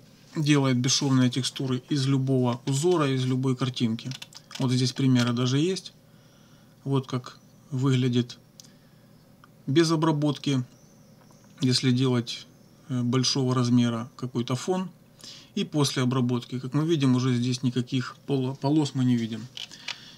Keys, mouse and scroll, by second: 2.7-3.1 scroll up 1, 4.1-4.8 scroll up 2, 5.1 scroll down 2, 19.5 scroll down 2.